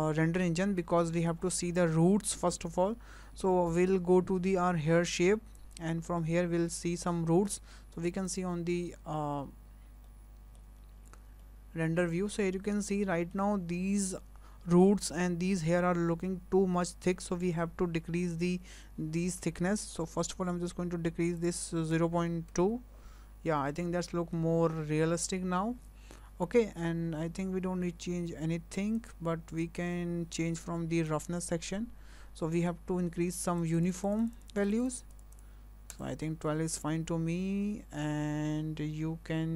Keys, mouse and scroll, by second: 0.9-2.9 scroll down 12, 2.9 scroll down 3, 5.6 click, 8.5 click, 9.6 scroll up 3, 10.0 shift+middle click, 11.4 shift+middle click, 21.4 click, 23.6 scroll down 3, 24.0 shift+middle click, 27.0-29.0 scroll down 4, 29.0 click, 31.1 click, 32.4-33.6 scroll down 1, 33.6 click, 33.8 click, 33.9-34.7 click, 34.1 click, 34.2 click, 35.4 click, 36.0 click.